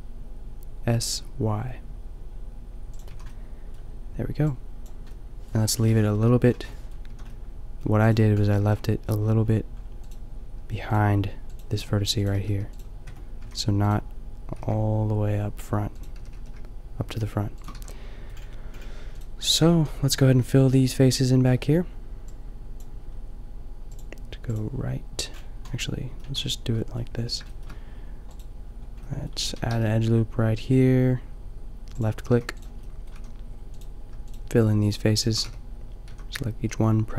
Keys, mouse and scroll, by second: 3.2 a, 3.7 click, 4.8 drag, 6.2 KP_5, 7.2 a, 8.0-8.3 middle drag, 8.6 a, 10.6 g, 11.8 Tab, 12.5 g, 13.1 Tab, 13.4 a, 14.5 g, 16.2 g, 17.7 a, 17.9-19.1 middle drag, 19.1-19.7 right drag, 19.7 Tab, 20.2 a, 20.4 a, 22.8 a, 25.8-27.4 middle drag, 28.3-30.5 middle drag, 29.4 a, 29.8 ctrl+r, 32.7 click, 33.4 a, 35.5 f, 36.1 a.